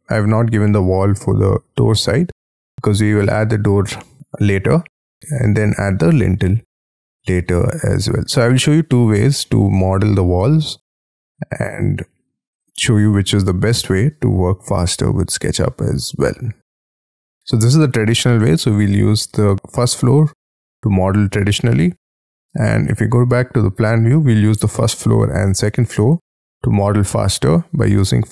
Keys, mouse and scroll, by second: 0.2 scroll up 2, 2.5 middle click, 6.6 scroll down 4, 7.7 middle click, 8.8 scroll down 7, 9.4 middle click, 10.9-11.5 scroll down 5, 11.7-16.6 scroll down 5, 16.7 scroll down 7, 17.3-18.3 scroll up 18, 18.4 middle click, 18.9-21.6 scroll down 5, 21.6-23.3 scroll down 4, 26.2-26.8 scroll up 6, 26.8 scroll down 4.